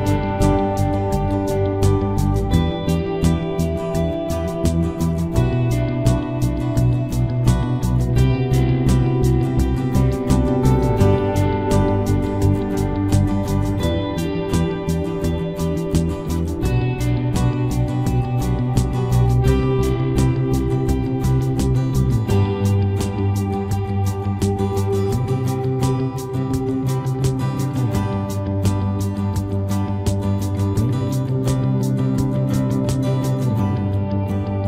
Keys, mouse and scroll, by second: 2.9 b, 3.1 right click, 3.8 g, 5.2-6.4 middle drag, 6.5 middle click, 6.6 right click, 6.7 g, 7.9 g, 8.8 g, 10.0 g, 11.2 g, 12.6-14.3 right drag, 15.0 ctrl+s, 17.3 right click, 17.7 g, 18.3 b, 18.7 g, 20.1 b, 20.3-21.4 right drag, 20.5 g, 22.6-24.5 right drag, 22.8 b, 23.2 g, 25.9-27.5 right drag, 26.0 b, 28.8 b, 29.2 g, 30.0 right click, 31.5 right click, 31.7 b, 32.6 KP_Decimal, 33.0 ctrl+s.